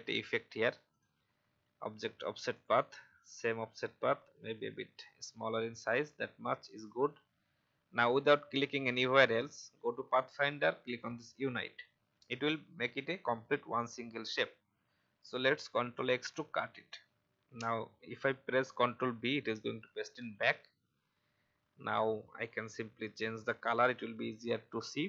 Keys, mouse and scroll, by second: 4.2-6.7 scroll down 1, 6.7-12.3 drag, 22.8 i, 23.4 click.